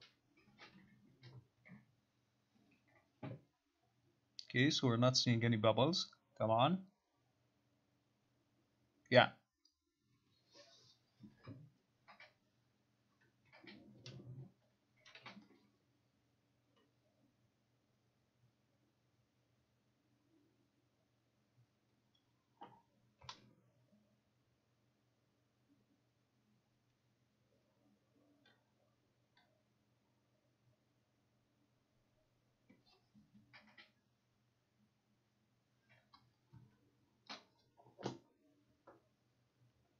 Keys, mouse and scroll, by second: 37.4 click.